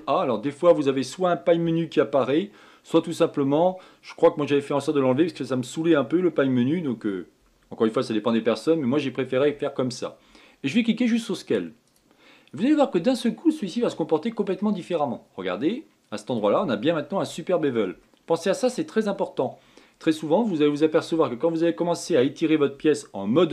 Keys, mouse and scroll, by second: 0.4 ctrl+a, 14.6 shift+middle click, 15.5-16.3 scroll up 7, 16.3-18.2 middle drag, 18.2-18.7 scroll up 2, 18.7 shift+middle click, 19.7-22.3 scroll down 2, 22.3-22.8 scroll down 1.